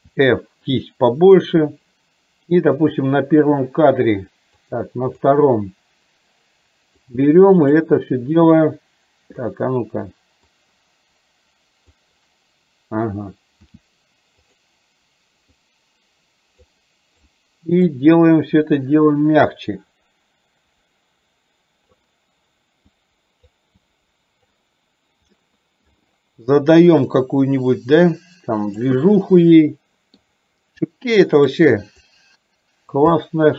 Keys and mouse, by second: 2.9 click, 4.6 click, 7.0 click, 8.0 click, 10.5-12.0 drag, 15.5-16.6 drag, 17.3 click, 18.6-22.0 drag, 23.0 click, 23.8 click, 25.4 middle click, 27.3-28.9 drag, 29.0-30.3 middle drag, 30.9 click, 32.1 click, 33.2 middle click.